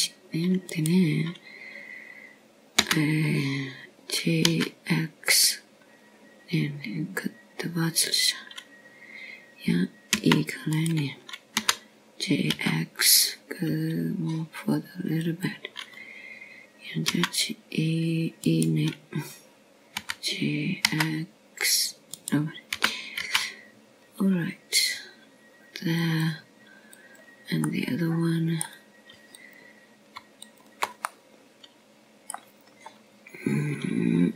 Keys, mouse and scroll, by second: 0.8 g, 2.7 e, 5.7 g, 13.0 e, 14.4 g, 20.1 e, 21.5 right click, 22.9 g, 25.6 g, 29.8 click, 30.5 middle click, 32.3 click, 33.3 shift+click, 33.9 middle click.